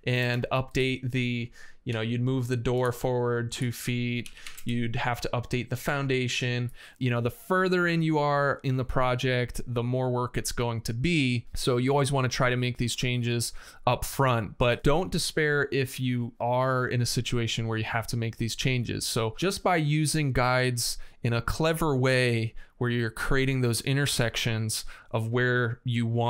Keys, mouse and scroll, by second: 0.1 space, 1.7 m, 4.0 KP_2, 4.2 space, 4.3 KP_Enter, 4.3 '.